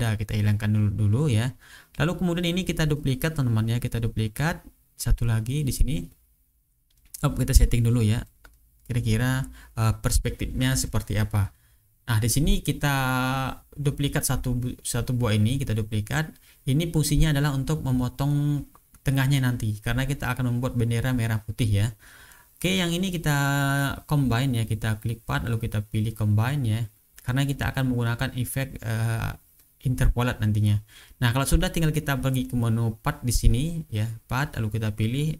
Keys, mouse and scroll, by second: 0.5 click, 1.1 click, 2.0 click, 5.2 click, 12.2 click, 13.4 click, 14.1 right click, 15.3 click, 16.4-18.5 drag, 19.0 ctrl+scroll down 2, 19.6-20.2 ctrl+scroll up 2, 20.2 ctrl+click, 21.0 click, 21.9 shift+click, 22.5-23.4 ctrl+shift+scroll down 2, 24.2 click, 27.4 click, 31.1 click, 31.9 click, 33.8 click.